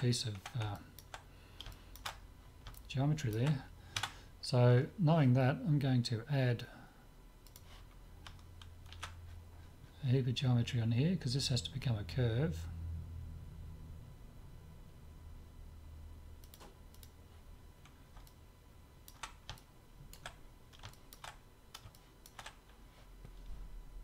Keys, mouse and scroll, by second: 0.7-3.4 middle drag, 3.9 Tab, 4.2-6.4 middle drag, 7.4-9.3 drag, 8.9 ctrl+r, 18.2-23.6 middle drag, 23.8 middle click.